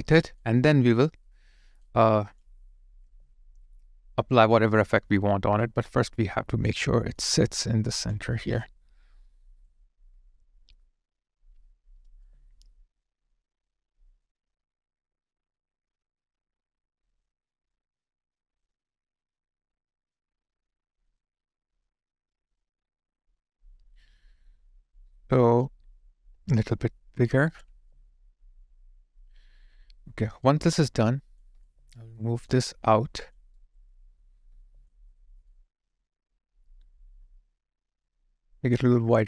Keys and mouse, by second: 5.5 alt+click, 6.8 alt+middle click, 7.3 alt+click, 12.1 alt+click, 27.9 alt+click, 31.5 alt+click, 32.1 alt+middle click, 32.6 alt+click, 33.5 alt+right click, 34.6 alt+click.